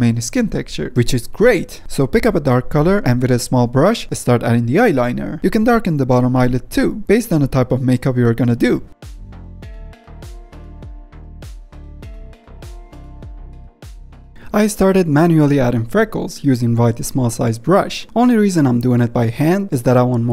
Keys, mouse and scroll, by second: 14.0 ctrl+middle click, 14.7-19.4 drag, 19.4 ctrl+middle click, 19.6 ctrl+z, 19.8-20.3 drag.